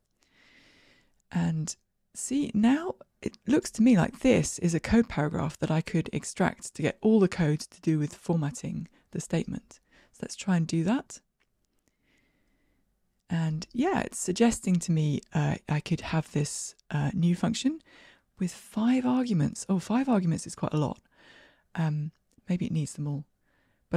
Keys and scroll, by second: 0.3 shift+Escape, 12.7 alt+super+m.